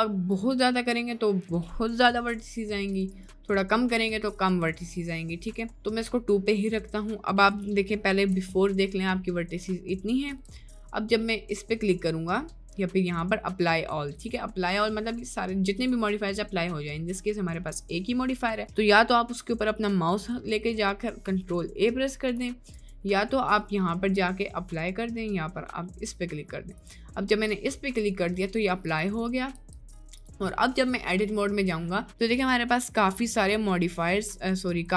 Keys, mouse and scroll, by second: 0.6 click, 2.9 click, 3.2-6.2 drag, 8.2 Tab, 9.4 middle click, 10.1 middle click, 10.3 Tab, 10.9 middle click, 22.7-25.3 drag, 26.9 click, 28.5 middle click, 29.1 click, 29.7 Tab, 30.6 middle click, 31.6 scroll up 1, 32.0 scroll down 1, 32.7-34.5 middle drag.